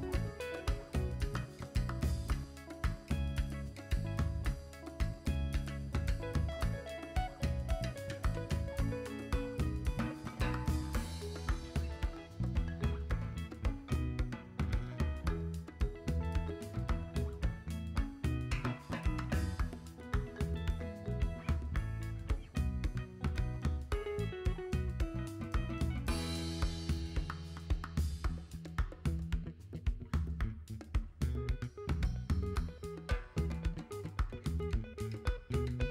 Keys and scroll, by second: 6.8 x, 7.9 v, 26.1 g.